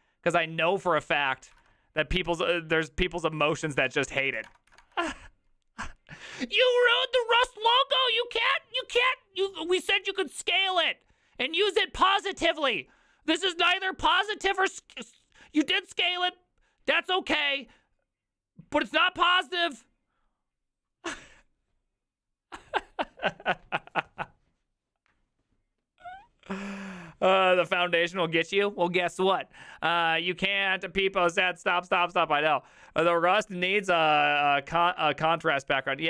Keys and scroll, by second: 1.6 ctrl+c, 3.5 ctrl+v, 3.7 Return, 3.9 ctrl+v, 4.0 Return, 4.2 ctrl+v, 4.2 Return, 4.5 Return, 4.7 ctrl+v, 4.8 Return.